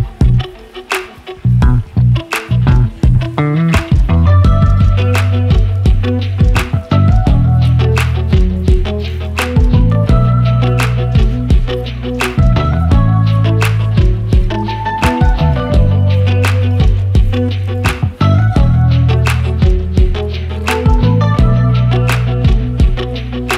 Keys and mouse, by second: 0.8 g, 6.2-7.0 middle drag, 7.8-8.4 middle drag, 9.2-9.9 middle drag, 11.7 g, 18.7 click, 21.5 middle click.